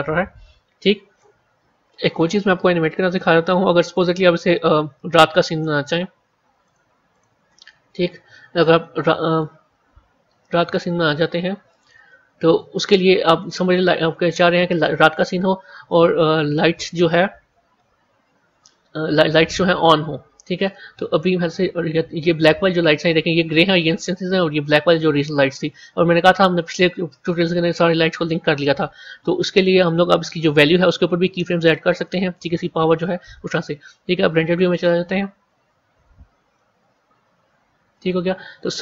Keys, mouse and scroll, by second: 2.6-3.0 scroll up 6, 3.7 click, 5.3 scroll down 1, 6.6 click, 7.0 click, 7.5 scroll down 1, 9.2 click, 10.6-11.7 drag, 12.4 click, 13.0-14.0 scroll up 6, 14.0-15.8 scroll up 2, 15.8-18.8 middle drag, 19.7-22.9 middle drag, 25.0 click, 30.5 click, 33.7 z, 36.6-38.8 middle drag.